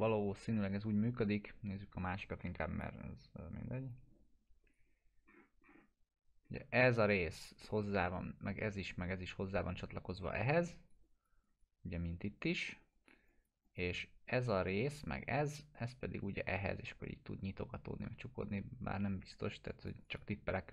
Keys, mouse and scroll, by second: 0.3-1.1 ctrl+scroll up 2, 1.1-2.0 scroll down 2, 2.3-2.9 drag, 5.2 scroll up 1, 10.7 click, 19.7 click.